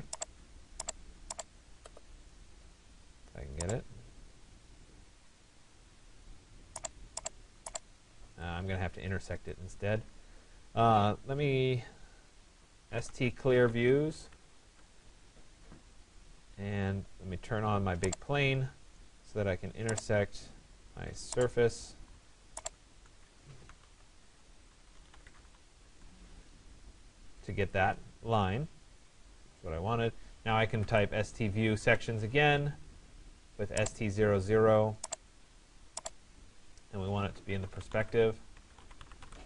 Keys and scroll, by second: 7.9 Escape, 12.8 s, 14.2 c, 14.3 l, 14.6 Return, 24.7 e, 25.1 r, 25.3 s, 25.5 e, 25.9 Return, 31.5 Return.